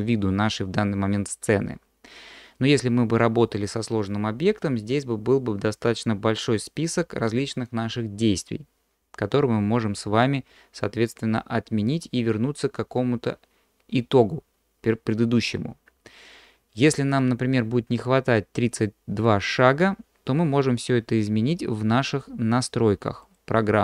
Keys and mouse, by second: 17.3-23.7 drag.